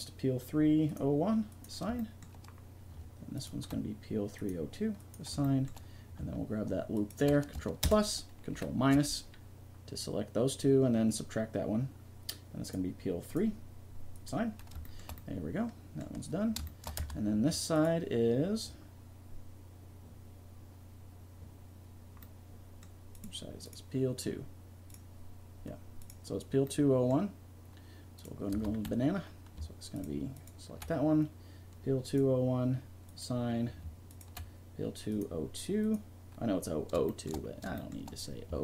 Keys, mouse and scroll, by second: 0.9 click, 2.6 click, 3.2 middle click, 3.3 click, 3.3 right click, 3.5 middle click, 4.4 click, 4.4 right click, 5.1 middle click, 5.3-6.8 drag, 6.8-7.8 middle drag, 7.8 ctrl+KP_Add, 8.5 ctrl+KP_Subtract, 12.6-14.6 drag, 14.6-17.0 middle drag, 17.0 Tab, 17.7 right click, 18.6-20.0 drag, 23.1 right click, 24.0-26.6 middle drag, 28.2 right click, 28.5 Tab, 32.3 click, 35.9-37.0 drag, 37.0-38.6 middle drag.